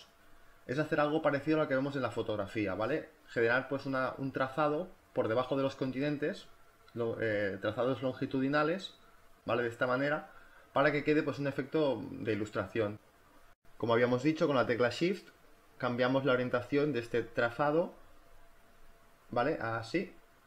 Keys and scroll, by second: 1.0 space, 2.0 b, 12.8 ctrl+z.